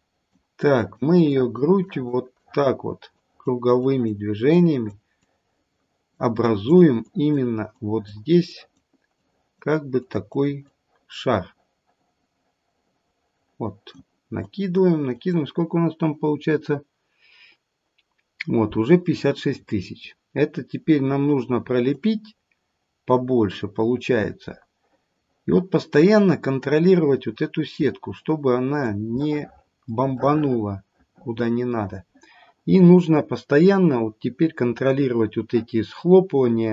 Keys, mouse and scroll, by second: 0.6 click, 1.2 click, 1.8 click, 2.4 click, 3.1 click, 3.7 click, 4.5 click, 5.2 click, 6.4 click, 7.0 click, 7.7 click, 8.5 click, 9.1 click, 10.0 click, 10.6 click, 14.4 click, 15.1 click, 19.4-20.0 scroll up 1, 20.0-20.8 scroll down 1, 20.8-21.7 scroll down 3, 21.9 click, 30.0 middle click, 30.2 middle click, 34.7 click.